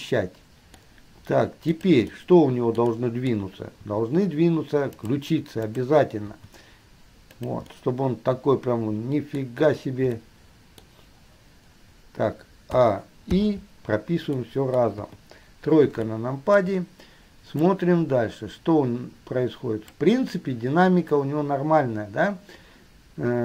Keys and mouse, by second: 0.2-1.0 middle drag, 1.0-1.8 drag, 1.8 middle click, 2.2-3.0 drag, 3.1 click, 4.0 r, 5.8 click, 6.6 r, 7.8-11.0 drag, 13.0 a, 13.6 i, 14.5-15.5 drag, 15.5 KP_3, 18.0-20.2 drag.